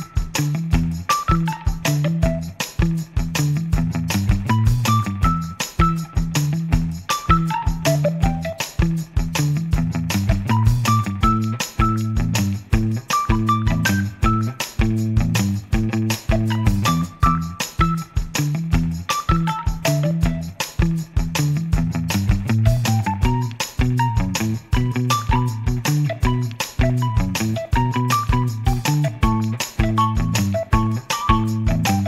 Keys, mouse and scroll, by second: 1.0 click, 1.7 click, 2.7 click, 6.2-7.5 drag, 8.7 click, 12.1 click, 14.2 click, 15.5-16.3 drag, 17.0 click, 18.8 click, 23.3 click, 24.6 click, 27.7-29.1 drag, 30.0 click.